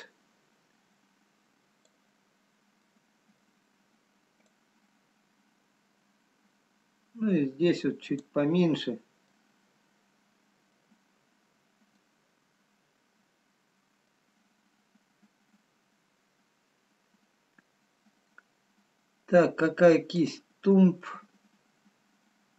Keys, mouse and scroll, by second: 3.5 middle click, 3.5-4.1 scroll down 3, 4.8 click, 4.8-5.1 scroll up 2, 9.4 middle click, 11.0-11.6 scroll up 1, 11.6-12.5 scroll down 1, 12.5 middle click, 15.6-15.9 scroll down 1, 22.4 click, 22.4-22.5 scroll down 3.